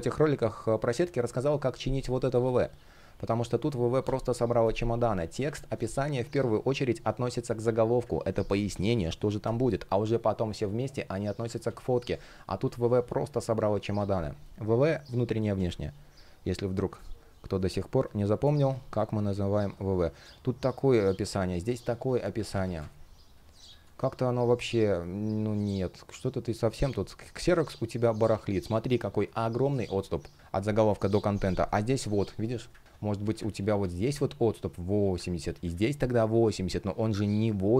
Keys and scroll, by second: 4.8 super+z, 5.1 super+z, 7.9 super+z, 11.2 super+z, 13.5 super+z, 15.1 super+z, 16.6 space, 22.1 super+z, 22.4 space, 29.4 space, 32.4 super+z.